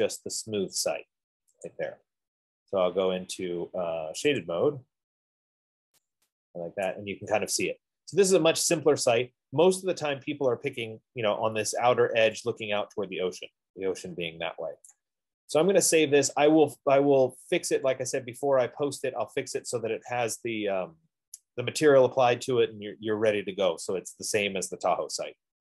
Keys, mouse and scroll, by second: 0.6 click, 1.0 scroll, 2.0 click, 4.5 middle click, 4.8 click, 5.7 middle click, 5.9 middle click, 7.5 middle click, 7.5 right click, 7.7 middle click, 8.0 middle click, 9.7 right click, 9.9 middle click, 10.0 middle click, 10.2 middle click, 10.8 middle click, 11.0 middle click, 12.4 scroll, 15.6 middle click, 15.6 right click, 15.8 middle click, 16.1 middle click, 17.0 middle click, 17.2 middle click, 18.2 middle click, 18.9 right click, 19.6 middle click, 22.1-22.7 scroll.